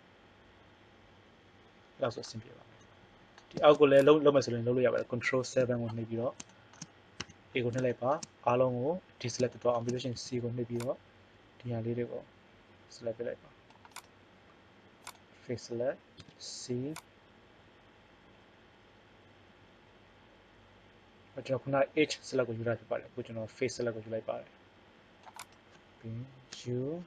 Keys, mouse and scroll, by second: 4.0 right click, 5.2 ctrl+KP_7, 7.2 a, 10.1 c, 14.0-17.0 drag, 16.2 c, 26.6 u.